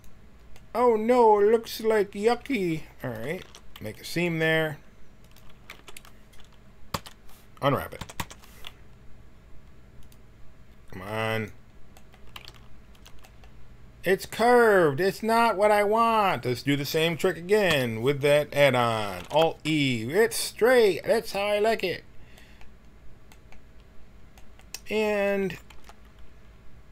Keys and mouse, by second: 0.5-1.5 middle drag, 0.5 right click, 3.0-5.7 drag, 3.4 ctrl+e, 5.7 t, 6.9 l, 8.0 u, 8.2 u, 12.4 g, 17.7 l, 19.2 alt+e, 25.4 a, 25.7 b.